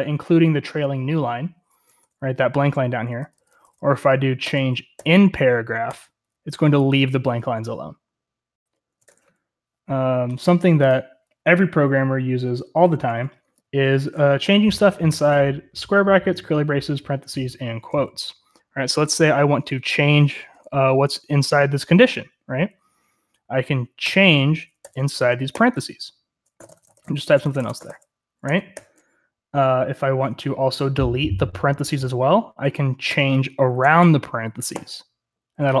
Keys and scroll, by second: 1.8 Escape, 2.0 typing, 3.2-5.8 typing, 8.9 Escape, 9.0 u, 11.1-13.3 typing, 19.0-20.9 typing, 23.8-28.7 typing, 28.4 Escape, 33.0-35.8 typing.